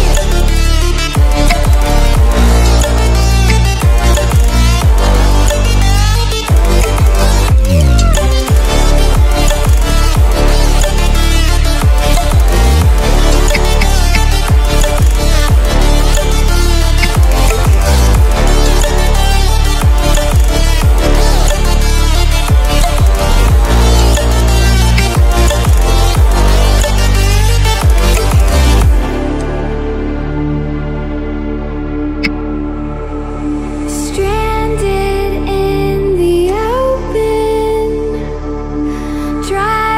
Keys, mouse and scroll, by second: 1.4 i, 2.4 click, 3.4 v, 3.7-6.5 drag, 6.9 right click, 7.7 click, 8.1 scroll up 1, 10.2 scroll up 1, 10.5-12.6 alt+drag, 13.4 ctrl+d, 16.9 ctrl+d, 16.9 ctrl+a, 20.2-21.2 alt+shift+drag, 24.8 l, 26.2-32.1 drag, 32.1 v, 32.9 click, 36.4-39.0 drag.